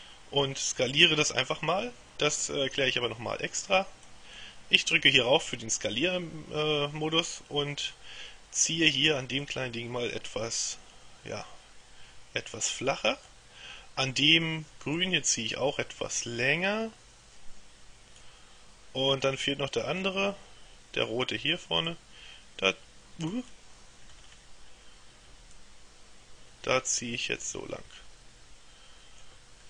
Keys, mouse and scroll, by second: 4.1 click, 9.5-13.9 drag, 15.1-18.8 drag, 19.3-20.6 middle drag, 21.9-24.1 drag, 23.4 right click, 24.2-24.9 scroll down 1, 25.6-29.6 drag.